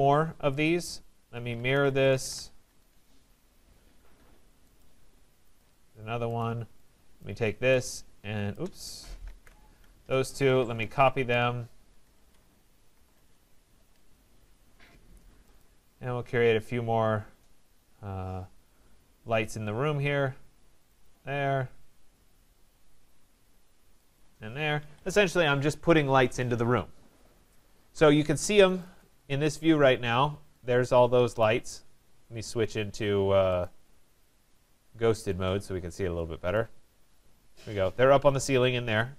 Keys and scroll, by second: 2.2 Return, 9.2 ctrl+z, 12.0 BackSpace, 13.2 Return, 24.8 Escape.